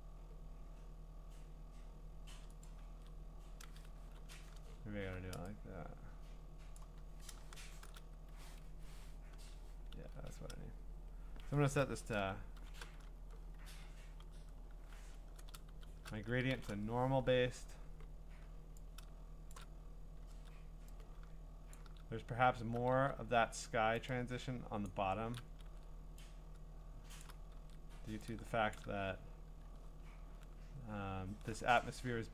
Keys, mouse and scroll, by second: 2.7 click, 2.9 ctrl+z, 4.0 g, 4.5-4.9 alt+scroll, 6.8 click, 6.8-7.6 scroll, 7.6 ctrl+shift+f, 8.6 Escape, 10.0 ctrl+z, 11.9 v, 12.6 alt+shift+o, 13.6 ctrl+z, 15.0 g, 15.7 alt+shift+o, 16.5 alt+shift+n, 17.6 g, 19.5 shift+click, 20.3 ctrl+z, 21.8 shift+click, 22.9 ctrl+z, 24.9 shift+click, 25.7 ctrl+z, 27.2 shift+click, 27.6 ctrl+z, 28.8 shift+click, 29.7-31.6 scroll.